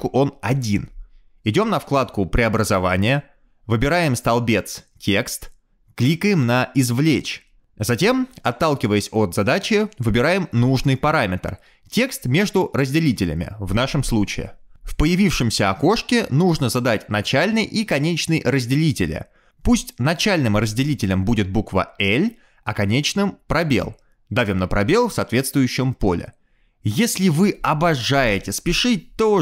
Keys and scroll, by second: 22.9 shift+l, 23.4 BackSpace, 23.7 space, 23.8 shift+l, 24.2 Tab, 26.8 space.